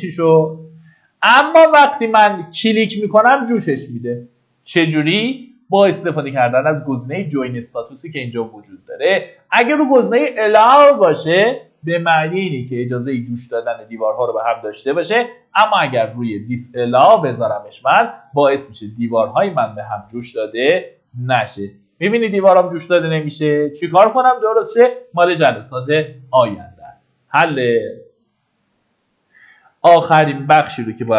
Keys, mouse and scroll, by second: 2.9 click, 5.9 Escape, 8.8-18.6 drag, 22.9 Escape, 25.8 scroll down 1, 27.8 Escape, 29.5-30.6 drag.